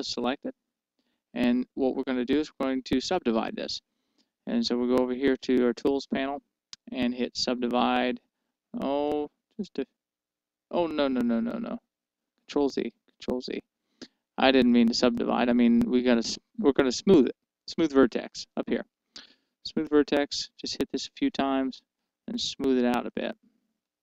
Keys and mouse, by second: 8.4-10.7 drag, 12.0 ctrl+z, 12.6 ctrl+z, 19.8-24.0 drag.